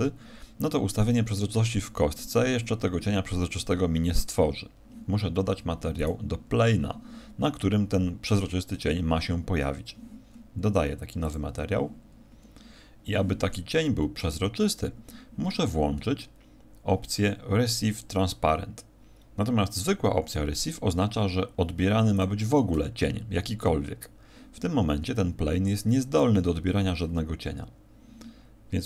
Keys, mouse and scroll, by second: 5.4 Escape, 5.9 right click, 10.3-11.2 scroll up 3, 11.2 click, 11.2-11.9 scroll up 1, 12.1 scroll down 6.